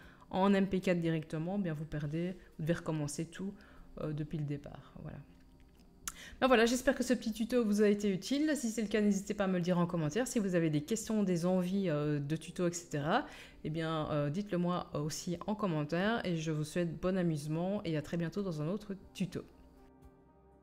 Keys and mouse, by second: 6.2-20.6 middle drag, 19.9-20.4 drag, 19.9-20.4 right drag.